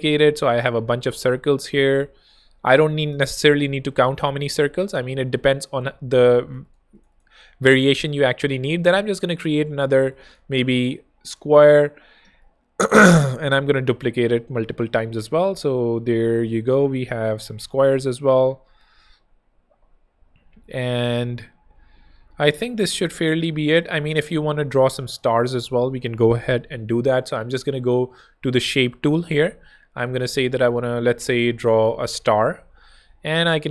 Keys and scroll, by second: 3.1 super+0, 3.9 super+d, 6.3 z, 7.5 r, 8.2 shift+r, 10.0 shift+z, 10.9 z, 11.4 f, 12.0 Tab, 13.6 alt+shift+super+[, 14.4 shift+super+d, 15.4 super+d, 17.6 super+d, 24.4 super+z.